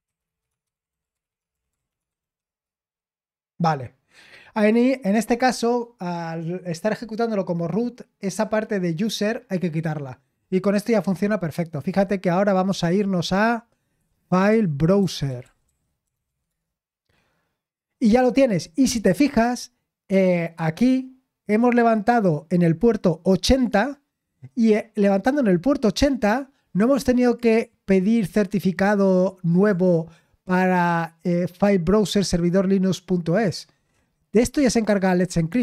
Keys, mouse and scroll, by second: 0.0-4.3 typing, 12.5 click, 12.8 click, 15.1-16.7 typing, 18.1-18.5 typing, 22.7 click, 27.2 click, 29.0 click, 29.5 click, 35.3 click.